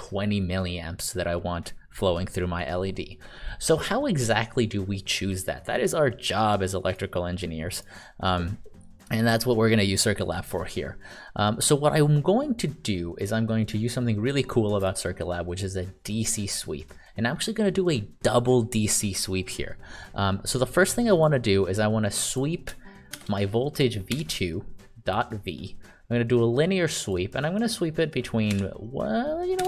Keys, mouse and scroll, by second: 7.7 click, 21.1 click, 23.1 shift+v, 24.1 2, 25.0 click, 28.5 1, 29.5 BackSpace.